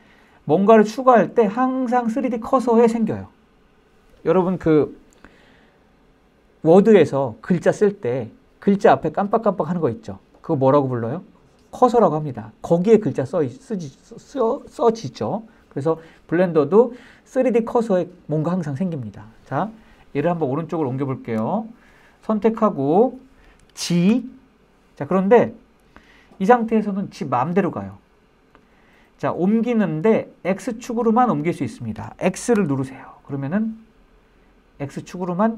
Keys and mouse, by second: 20.8-21.7 drag, 23.5 g, 32.0 x.